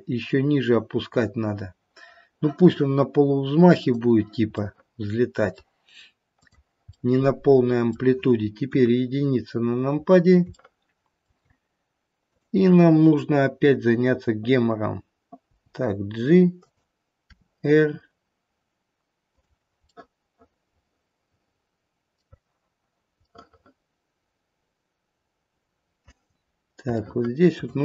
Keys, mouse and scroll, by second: 3.8 click, 4.7 middle click, 4.8 middle click, 6.3 click, 6.3 middle click, 6.9 middle click, 8.7 KP_1, 9.2-9.9 scroll up 1, 9.9 scroll up 2, 10.1 scroll down 2, 10.5 shift+middle click, 11.2 shift+middle click, 12.2 click, 17.3 g, 17.3 r, 19.9 middle click, 21.0 middle click, 23.2 middle click, 25.5 middle click, 25.9 middle click, 26.3-26.7 scroll up 1, 26.9 shift+middle click, 27.5 shift+middle click.